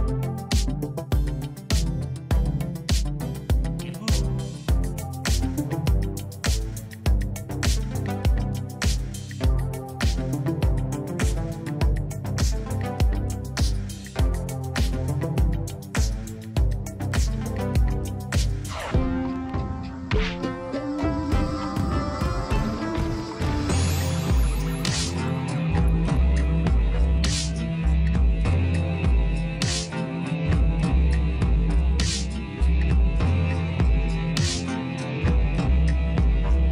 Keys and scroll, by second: 21.2 1, 25.1 v, 30.9 ctrl+=, 36.3 1.